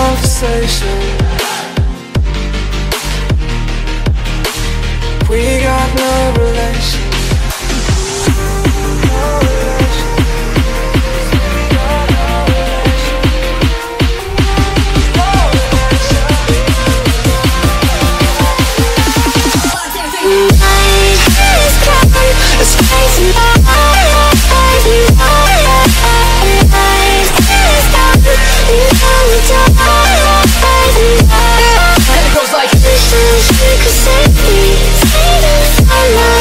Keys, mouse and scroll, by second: 0.1 click, 2.0 click, 4.3 click, 4.6-5.4 typing, 6.6 click, 6.7 click, 7.7 click, 9.9 middle click, 10.5 middle click, 11.7 click, 13.1 click, 13.6-14.5 typing, 15.6 click, 17.9 click, 18.8 click, 23.6 click, 24.4 alt+Tab, 25.9 click, 27.3 click, 27.8 alt+Tab, 29.0 alt+Tab, 29.6 alt+Tab, 31.7 click, 32.9 click, 34.0 click, 34.6 z, 35.1 click.